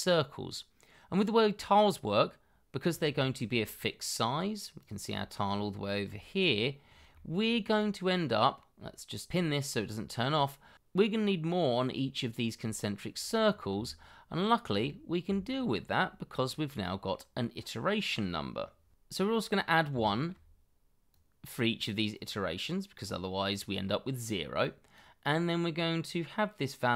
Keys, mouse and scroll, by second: 0.0-2.0 scroll up 1, 2.8 scroll down 1, 3.1 shift+middle click, 3.6-4.8 scroll down 1, 5.1 shift+middle click, 5.5-6.1 scroll up 1, 6.1 shift+middle click, 6.8 scroll down 1, 7.1 shift+middle click, 8.0 scroll up 1, 9.7-10.1 scroll down 1, 10.1-11.8 scroll up 1, 14.6-15.1 ctrl+scroll down 1, 15.7-16.1 shift+scroll up 1, 16.4-17.1 ctrl+scroll down 2, 17.3 middle click, 19.5 shift+d, 21.1 shift+middle click.